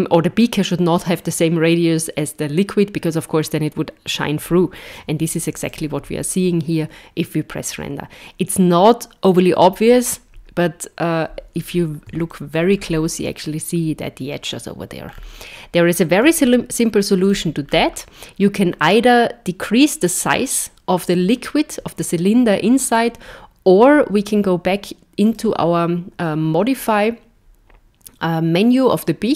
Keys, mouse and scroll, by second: 4.9 z, 11.7 scroll up 2, 12.3 shift+middle click, 12.8 scroll up 3, 15.1 scroll down 5, 16.2 z, 17.7-18.3 scroll down 1, 18.3-19.3 scroll down 1, 22.9 click, 25.3 click.